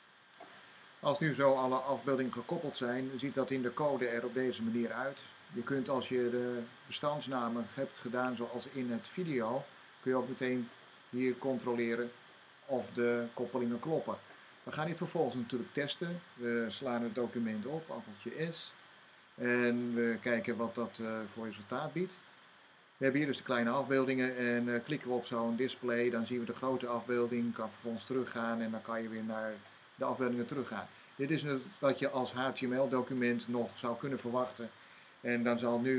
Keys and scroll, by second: 18.0 s.